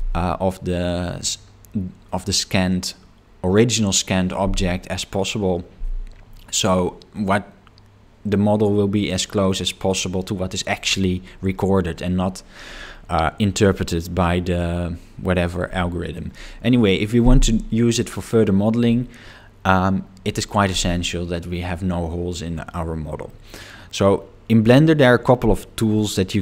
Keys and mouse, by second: 23.4-24.5 middle drag.